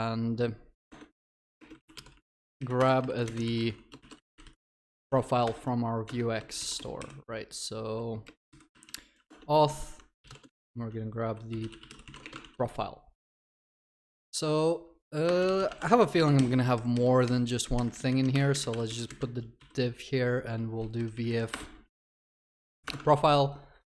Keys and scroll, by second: 2.8 Return, 5.4 alt+Return, 12.4 ctrl+s, 15.7 Tab, 23.1 ctrl+s.